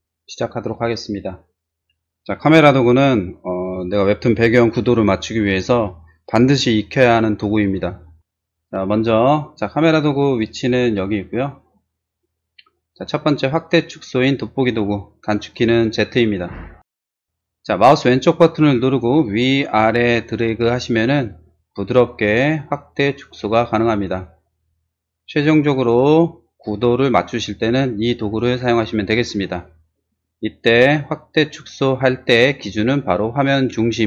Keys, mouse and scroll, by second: 15.5 click, 15.9 z, 19.1-22.4 drag, 21.9 right click, 22.6 click, 22.8 click, 23.0-24.6 drag, 24.6 middle click, 24.8-30.9 drag.